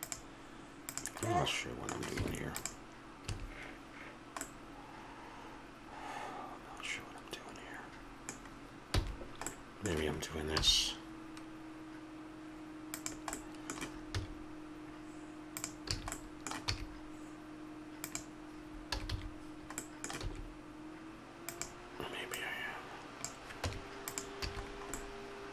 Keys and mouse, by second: 0.9 right click, 2.2 Tab, 3.3 a, 7.1 middle click, 8.9 f, 10.6-12.3 middle drag, 10.6 i, 13.3 middle click, 15.6 x, 15.9 a, 16.6 e, 18.9 a, 19.1 a, 20.2 s, 23.6 Tab, 24.5 a, 25.0-25.5 middle drag.